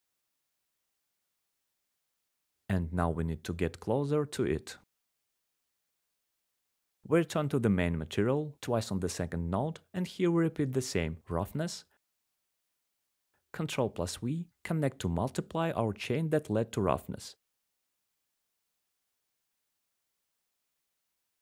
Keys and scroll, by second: 17.6 ctrl+v.